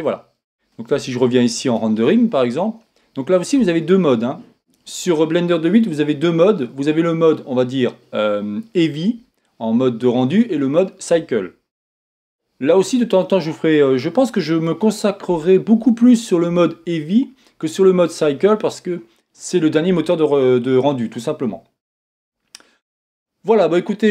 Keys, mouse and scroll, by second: 0.2-2.6 middle drag, 0.5-2.6 scroll up 2, 2.6 z, 3.7-4.4 scroll up 2, 3.7 middle click, 4.4-5.5 scroll down 3, 4.6 middle click, 12.9-24.1 middle drag, 24.0 scroll up 1.